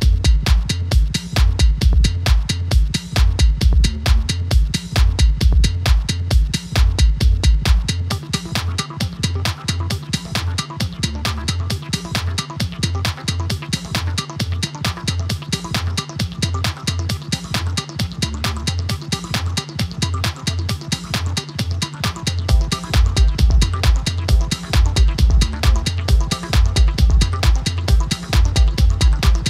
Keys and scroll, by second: 3.0 typing, 7.2 typing, 18.2 typing, 20.9 typing, 28.6 typing.